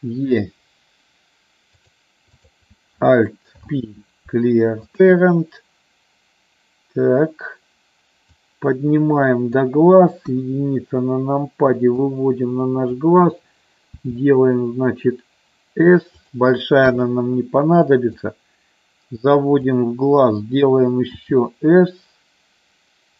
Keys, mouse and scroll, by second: 2.2 click, 3.6 alt+p, 8.3-9.6 drag, 10.2 KP_1, 12.0 click, 14.0 s, 16.2 click, 16.7 KP_3, 18.2-19.7 drag, 21.1 s.